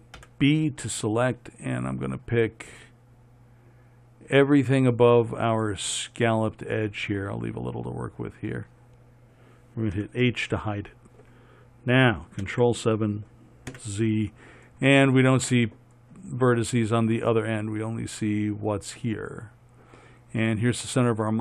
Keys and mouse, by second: 0.5 b, 10.3 h, 12.8 ctrl+KP_7, 14.0 z.